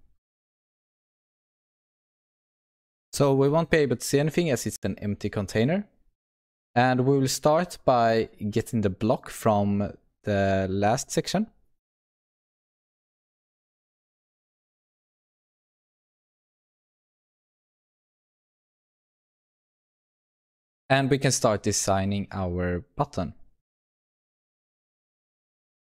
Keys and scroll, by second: 1.6 ctrl+s, 18.5 alt+Return.